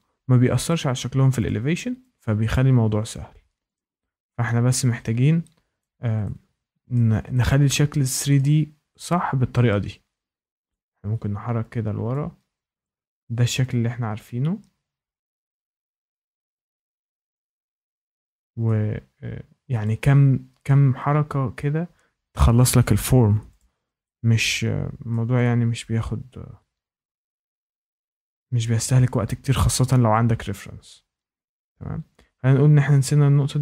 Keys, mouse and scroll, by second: 0.6 click, 1.4 click, 3.0 click, 3.7 click, 5.7 click, 6.9 shift+middle click, 8.3 shift+middle click, 9.6 shift+middle click, 10.7 click, 12.1 click, 12.8 click, 16.0 click, 18.6 shift+middle click, 19.8 click, 22.3 click, 23.5 click, 25.0 shift+middle click, 27.8 click, 31.1 click.